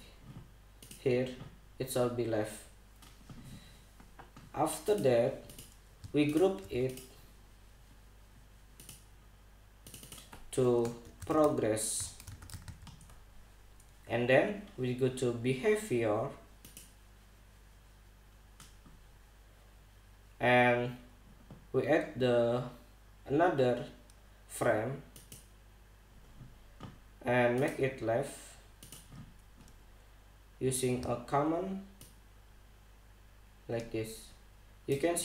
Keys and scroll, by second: 11.5-13.7 typing.